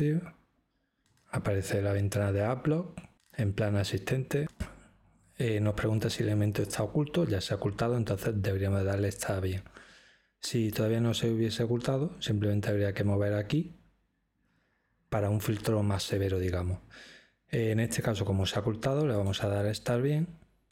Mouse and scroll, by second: 12.7-13.7 drag, 19.1-20.1 drag.